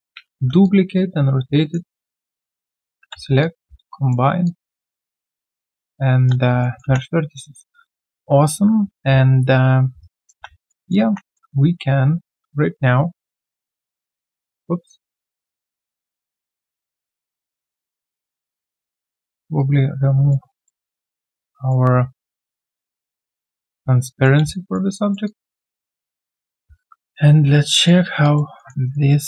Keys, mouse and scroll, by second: 0.3 d, 2.4 shift+click, 2.9 ctrl+alt+c, 3.1 alt+q, 3.4 alt+click, 3.8 right click, 5.1 shift+right click, 6.6 alt+middle click, 6.8 3, 10.0 right click, 10.3 q, 10.5 alt+right click, 10.7 alt+click, 11.0 1, 11.3 alt+middle click, 11.6 alt+scroll down 1, 12.9 ctrl+right click, 14.1 ctrl+right click, 15.8 ctrl+a, 19.5 double click, 20.5 alt+right click, 20.8 alt+click, 21.0 alt+middle click, 21.3 alt+click, 22.1 alt+click, 22.4 alt+middle click, 24.0 alt+click, 24.4 alt+q, 24.9 alt+click, 25.2 alt+double click, 25.9 alt+click, 26.3 alt+scroll down 1, 26.7 ctrl+a, 28.2 alt+click, 28.6 alt+middle click, 28.8 alt+right click.